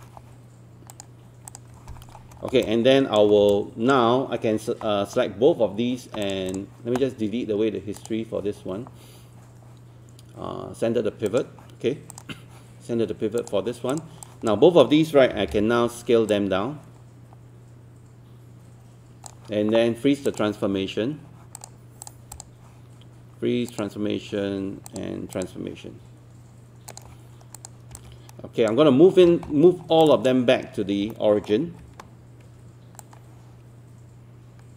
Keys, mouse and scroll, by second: 0.9 click, 2.2-2.6 scroll down 1, 2.6 alt+click, 3.4 scroll down 1, 3.5 alt+click, 6.2 click, 15.4 e, 16.3-29.1 drag, 29.1 scroll down 1, 29.7-30.0 scroll up 1, 30.0 click, 30.8 scroll up 1, 31.1 alt+middle click, 33.0-34.7 drag.